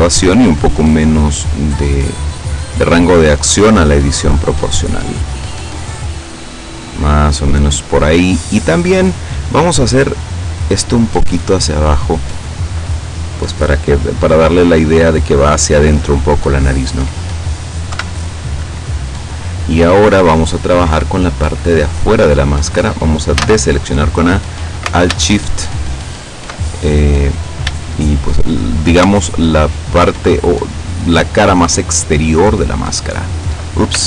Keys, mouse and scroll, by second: 0.2-0.9 scroll up 1, 1.8 scroll up 2, 2.3 scroll up 2, 4.0-5.5 middle drag, 6.2 scroll down 2, 6.3-8.1 middle drag, 8.9 right click, 9.5 middle click, 10.6-12.3 drag, 12.3-14.3 middle drag, 16.3-16.9 scroll up 1, 16.9-18.0 scroll down 2, 18.0-18.5 scroll down 1, 18.0 KP_7, 18.5 scroll down 1, 18.8-19.3 scroll up 2, 19.3-19.8 scroll down 2, 19.8-20.9 middle drag, 23.4 a, 25.7 alt+shift+right click, 27.1-27.4 scroll up 2, 27.4-27.7 scroll down 2, 27.9-28.9 shift+middle drag, 29.5 alt+shift+right click, 31.1 alt+shift+right click, 32.5 alt+shift+right click.